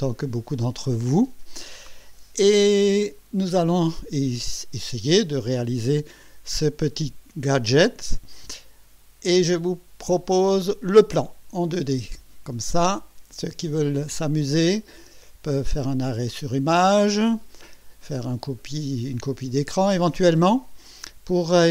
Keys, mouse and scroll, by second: 10.7 click.